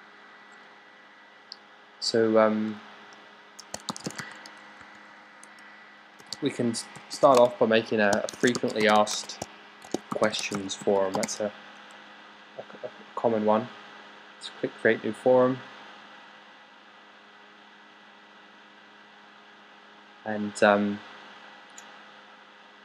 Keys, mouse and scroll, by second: 3.5-11.6 typing.